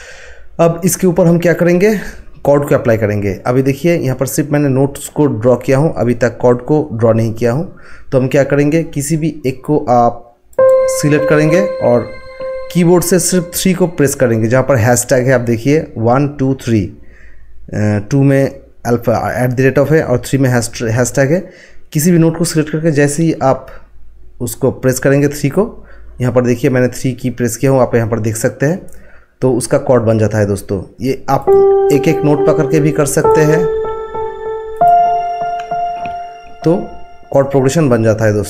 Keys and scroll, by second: 23.2 3, 32.1 3.